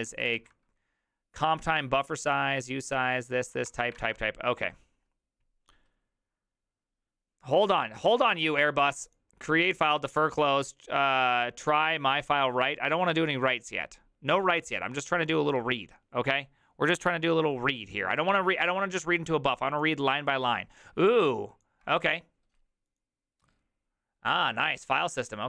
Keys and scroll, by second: 0.0-0.9 typing, 3.7 ctrl+c, 4.0 alt++.